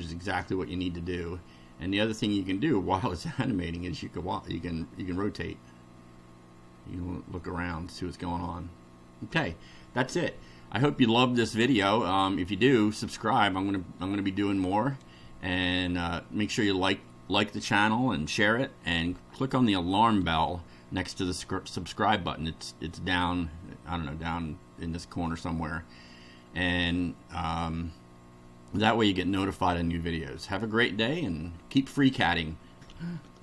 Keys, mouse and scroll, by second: 2.5-8.0 middle drag.